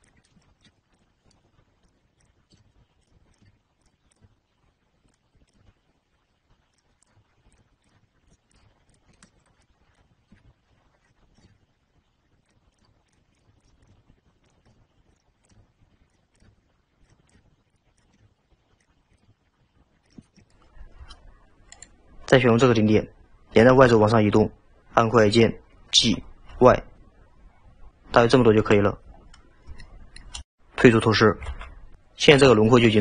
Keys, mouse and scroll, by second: 0.2 scroll down 2, 0.4 shift+middle click, 1.0 click, 1.4 g, 2.3 click, 2.6 g, 3.4 click, 3.4 g, 4.2 click, 4.3 g, 5.5 drag, 5.6 g, 7.0 drag, 7.1 g, 7.9 click, 8.0 g, 8.6 click, 8.6 g, 9.3-10.0 shift+middle drag, 10.0 click, 10.4 g, 11.4 drag, 11.5 g, 12.8 click, 12.8 g, 13.4 click, 13.4 g, 13.8 click, 13.9 g, 15.5 click, 15.6 g, 16.4 drag, 16.4 g, 17.3 drag, 17.4 g, 18.1 click, 18.2 g, 19.2 click, 19.3 g, 20.3-21.6 scroll up 4, 20.4 shift+middle drag, 21.8 click, 26.0 g, 29.3-29.8 scroll down 5, 29.8-30.6 shift+middle drag, 31.5 alt+z.